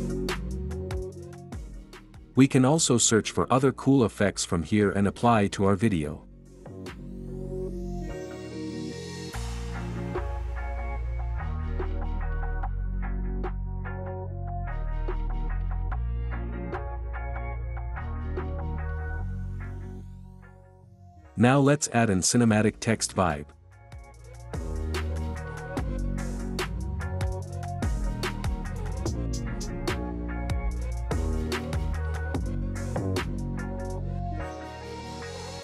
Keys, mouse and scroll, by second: 0.7 Escape, 1.8 click, 15.7-16.7 drag, 19.1-20.1 drag, 22.0-23.0 drag, 23.5-24.7 drag, 25.1 click, 30.0 click, 31.1-35.6 typing.